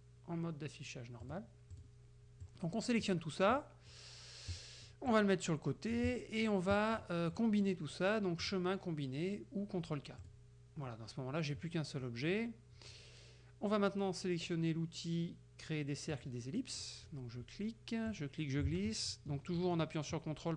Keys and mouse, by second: 1.3 click, 1.8 click, 2.5 click, 3.6 middle click, 4.6 middle click, 6.1 click, 7.1 middle click, 8.5 click, 10.3 click, 12.1 middle click, 16.2 click, 16.8 middle click, 18.1-20.5 drag.